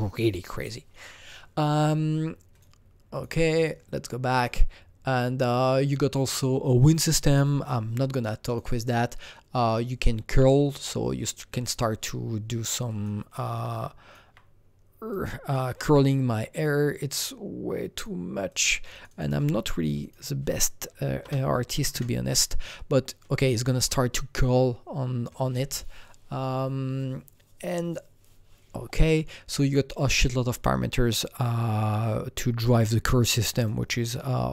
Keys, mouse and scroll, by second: 2.5 KP_Enter, 2.5 click, 3.1 click, 3.5 click, 4.3 click, 6.1 click, 8.4 click, 9.6 click, 10.6-13.3 drag, 12.5 alt+right click, 12.8 alt+double right click, 13.3-18.9 alt+drag, 18.9-20.0 drag, 21.2 BackSpace, 21.7 KP_1, 21.9 Return, 33.5 Return, 33.5 KP_1, 33.5 BackSpace, 33.5 click.